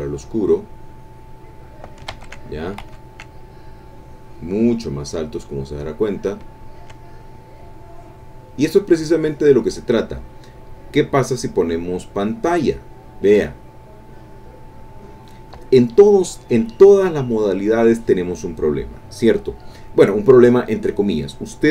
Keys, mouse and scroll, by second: 2.2 ctrl+z, 2.8 ctrl+z, 3.8-6.3 drag, 6.8 ctrl+click, 7.1-9.6 ctrl+drag, 10.3 click, 12.4 click.